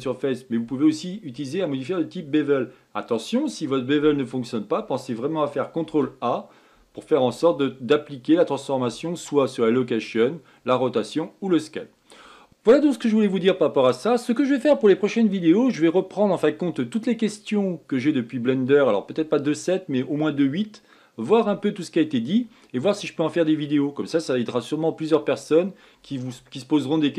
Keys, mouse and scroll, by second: 6.6 ctrl+a.